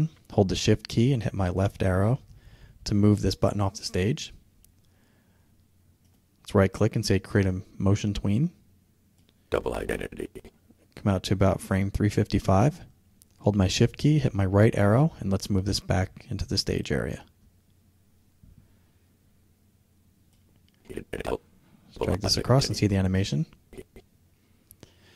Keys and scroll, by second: 0.9 shift+Left, 13.5 shift+Right.